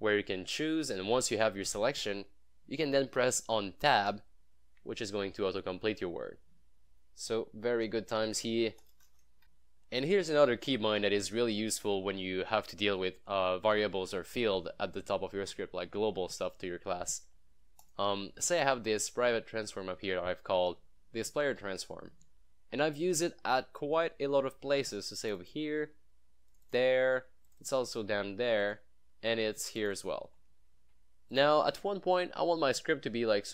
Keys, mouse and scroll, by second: 4.0 Tab, 8.3 Tab, 8.5 shift+9, 9.0 BackSpace, 9.4 click, 17.9 click, 25.3 click, 25.9 scroll down 1, 26.5 click, 27.9 scroll up 1, 28.7 click, 28.9 scroll down 1, 29.8 click, 30.4 scroll up 1, 31.4 click.